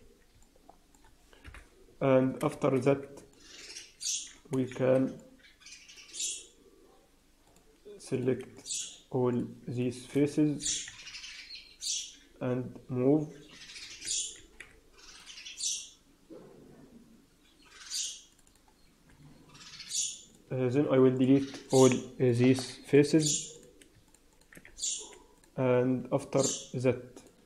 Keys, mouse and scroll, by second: 0.3 middle click, 1.4 KP_1, 1.8 Tab, 2.0 scroll up 2, 2.4 shift+z, 2.8 scroll up 2, 3.2 shift+middle click, 4.6 shift+z, 5.1 middle click, 7.4 click, 8.0 click, 8.4 shift+click, 9.2 click, 9.6 shift+click, 10.5 g, 14.2 ctrl+r, 18.4 click, 20.2 click, 21.0 click, 21.6 click, 22.2-22.8 shift+click, 22.8 shift+click, 23.4 click, 24.0 shift+click, 24.2 shift+click, 24.6 x, 27.1 click.